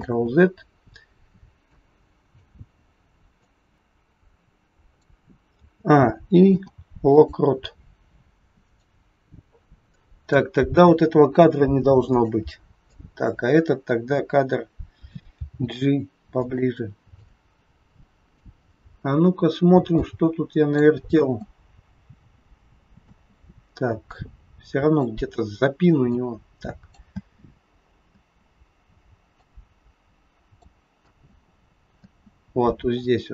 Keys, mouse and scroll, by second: 0.0 ctrl+z, 1.6 click, 3.3 click, 3.8 click, 5.6 a, 6.5 i, 8.3 click, 8.6 click, 11.5 Delete, 11.5 click, 12.8 click, 15.3 g, 17.3 click, 18.6 scroll up 1, 18.8-19.4 scroll down 3, 20.0 click, 21.0 space, 23.1 space, 24.1 click, 26.3 click, 27.0 space, 28.1 space, 29.5 click, 31.0 space, 32.1 space, 33.0 click.